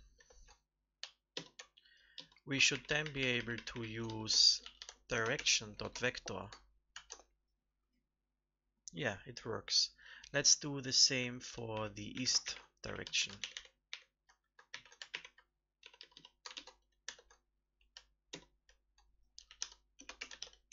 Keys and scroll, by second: 0.1 ctrl+v, 1.3 alt+Left, 2.7 ctrl+shift+Right, 2.8 ctrl+shift+Right, 3.0 ctrl+shift+Right, 3.1 ctrl+shift+Right, 3.3 ctrl+shift+Right, 3.5 ctrl+shift+Right, 3.6 ctrl+shift+Right, 6.9 ctrl+s, 12.4 ctrl+Right, 13.3 ctrl+alt+Up, 13.5 ctrl+alt+Up, 13.8 ctrl+alt+Up, 14.6 ctrl+c, 15.0 alt+Right, 16.5 ctrl+shift+Left, 17.0 ctrl+v, 18.2 alt+Left.